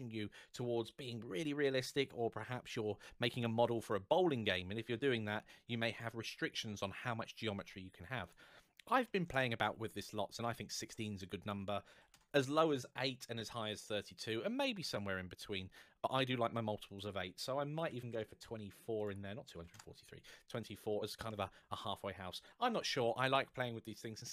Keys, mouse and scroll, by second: 3.6-5.2 scroll down 1, 8.0 click, 8.8 KP_1, 9.0 KP_6, 9.1 Return, 11.2 click, 11.8 KP_8, 11.9 Return, 12.6 middle click, 16.6 click, 17.7 KP_2, 17.8 KP_4, 17.9 Return, 18.8 click, 19.3 KP_2, 19.4 KP_4, 19.6 Return, 20.4 middle click.